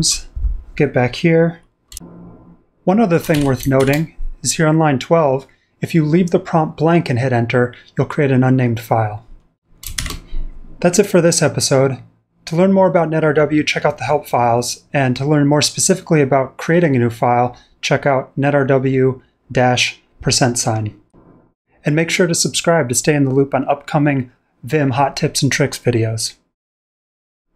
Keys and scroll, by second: 3.0-4.3 typing, 9.9 shift+g.